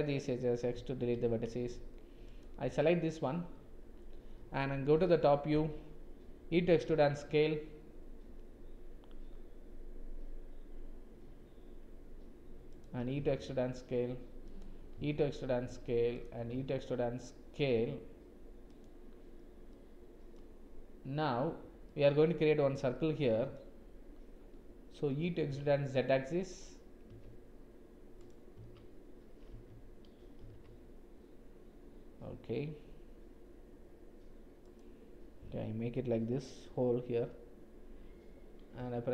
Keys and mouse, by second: 0.7 x, 4.9 KP_7, 6.5 e, 12.9 e, 14.8 e, 16.4 e, 19.8 click, 21.9 middle click, 23.0 middle click, 25.2 e, 30.4 g.